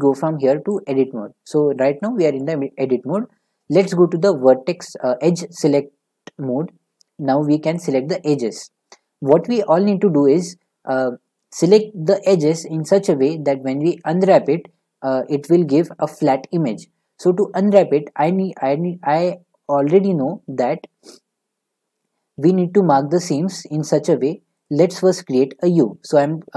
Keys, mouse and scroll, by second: 0.8 click, 2.4 middle click, 5.7 click, 7.7 click, 8.6 click, 10.6 middle click, 22.0-22.9 scroll, 22.9 scroll, 24.6 click.